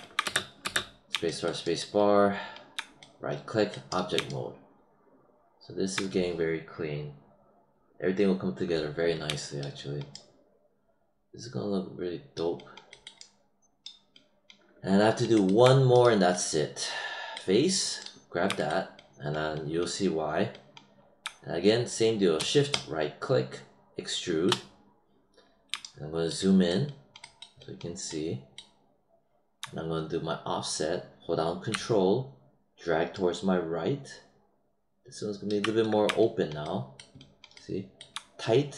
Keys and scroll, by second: 0.2 space.